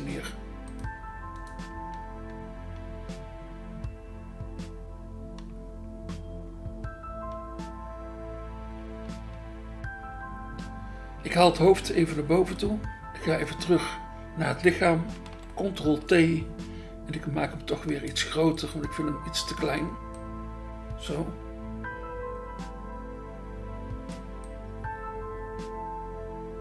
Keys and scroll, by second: 15.3 ctrl+t.